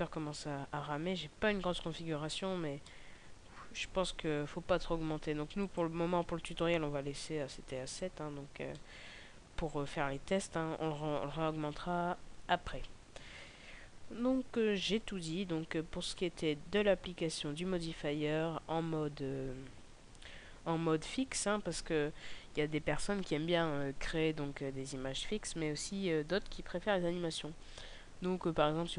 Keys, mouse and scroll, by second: 3.2 middle click, 6.0 click, 8.5 middle click, 10.3 KP_0.